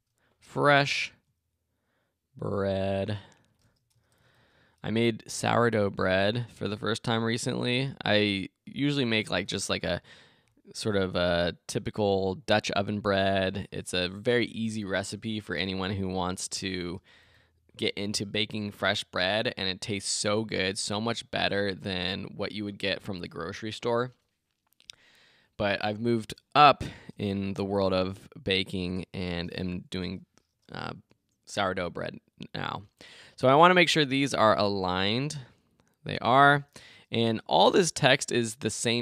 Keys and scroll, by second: 27.6 shift+Right.